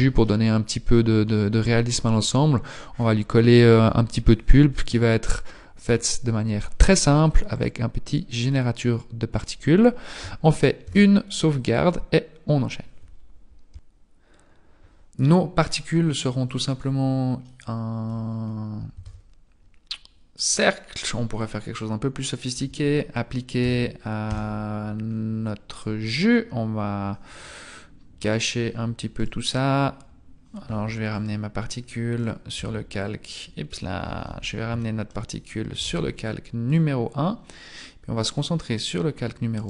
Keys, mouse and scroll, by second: 0.2 shift+middle click, 7.4 click, 11.0 ctrl+s, 16.5 click, 17.4 middle click, 18.4-18.9 scroll up 2, 18.9 shift+a, 21.4 click, 22.5 Tab, 23.6 f, 24.2 Tab, 25.0-25.4 scroll up 4, 25.8 right click, 28.3 click, 29.3 right click, 31.1 click, 32.2 right click, 32.6 h, 33.8-34.2 scroll down 2, 34.2 alt+h, 34.8 shift+middle click, 35.8 m, 37.2 scroll up 3, 38.4 click.